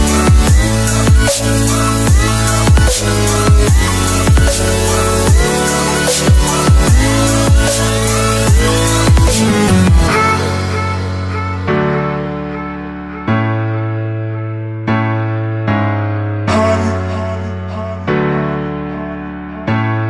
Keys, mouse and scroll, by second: 2.4 click, 4.3 click, 5.7 right click, 6.4 click, 16.0 F2, 16.9 right click, 18.4 click.